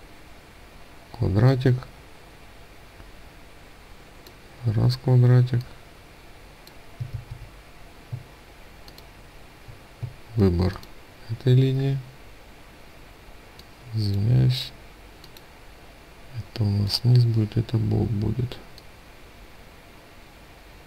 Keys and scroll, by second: 6.5 ctrl+z.